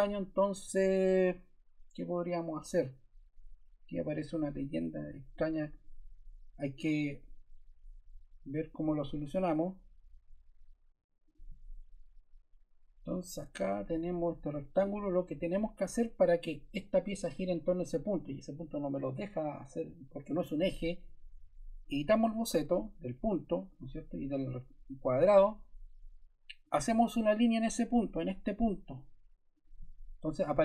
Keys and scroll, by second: 9.0 Escape.